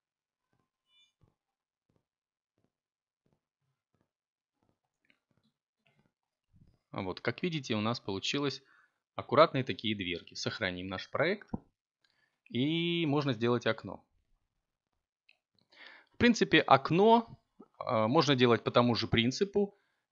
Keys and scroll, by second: 15.8 7.